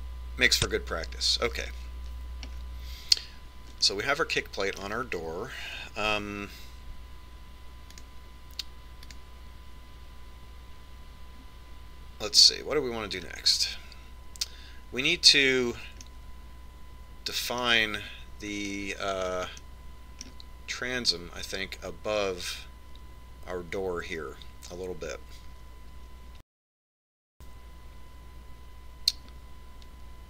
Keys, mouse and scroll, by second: 0.5 click, 1.3-3.2 middle drag, 4.4-5.7 scroll down 1, 5.7-7.5 middle drag, 15.0-16.8 scroll down 1, 16.8 scroll down 1, 18.0-19.9 middle drag, 21.5-23.2 middle drag.